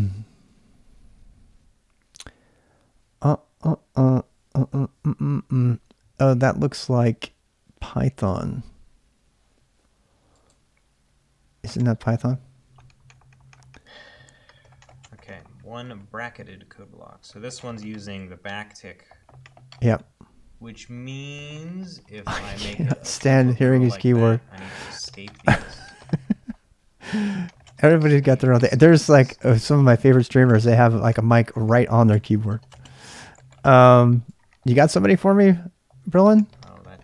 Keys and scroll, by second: 7.5-8.2 typing.